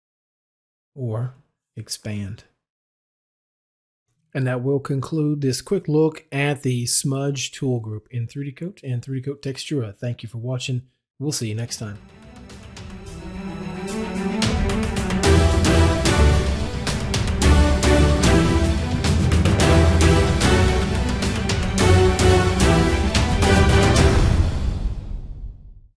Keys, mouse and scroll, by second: 1.3 click, 2.8-6.2 drag, 11.7 middle click.